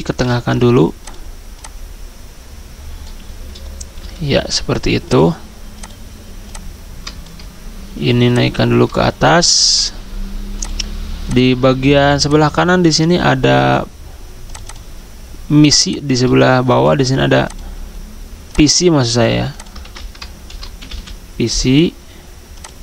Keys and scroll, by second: 4.0 c, 19.8 ctrl+a, 20.5 typing.